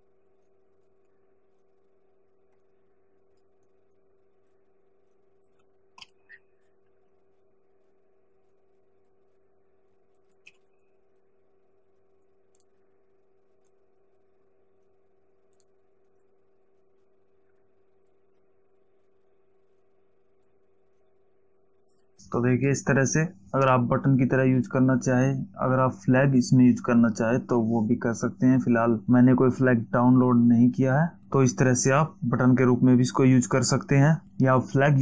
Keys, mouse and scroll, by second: 0.7 click, 1.8 alt+click, 4.7 click, 5.3 click, 6.2 shift+2, 8.1 click, 8.7 click, 10.2 click, 10.7 ctrl+t, 11.4 click, 14.2 click, 15.9 alt+shift+click, 17.8 click, 19.3 click, 20.0 click, 21.2 click.